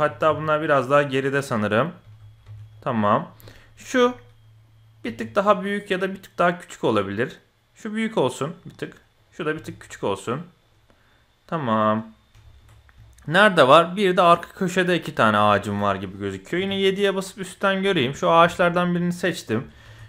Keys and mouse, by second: 0.0 g, 2.0 g, 3.4-3.8 middle drag, 4.1-4.6 middle drag, 5.1 s, 9.1 click, 9.5 s, 10.8-12.2 middle drag, 12.4 shift+middle click, 13.1-13.4 shift+middle drag, 13.9 shift+middle click, 15.4 shift+middle click, 16.6 KP_7, 17.9 shift+click, 18.4 shift+click, 19.8 shift+d.